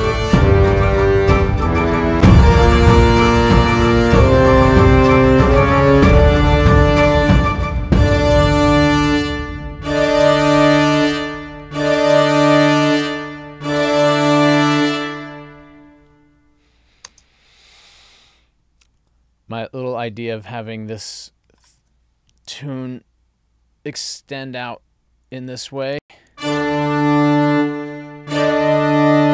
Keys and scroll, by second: 17.1 space, 26.0 space.